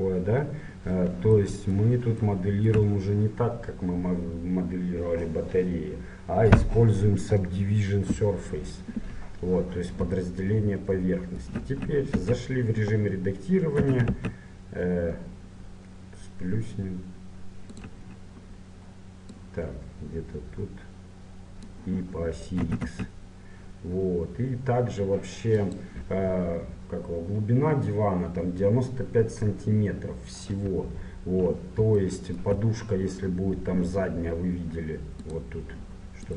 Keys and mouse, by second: 2.4-3.9 drag, 3.9-12.3 middle drag, 12.3 Tab, 13.8 s, 19.3-21.1 drag, 22.6 s, 30.8 KP_7.